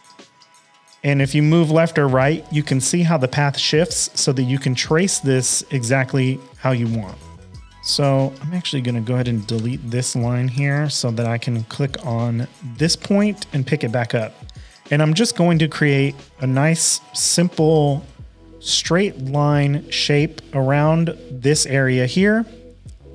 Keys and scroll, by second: 7.5 shift+super+a, 7.6 space, 8.1 a, 9.5 BackSpace, 10.5 p.